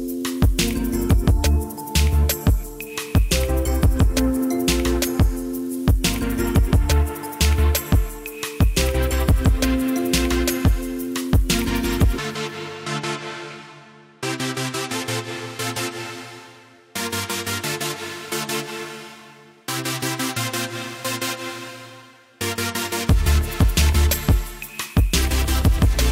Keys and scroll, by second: 11.6 Delete, 24.8-26.0 typing.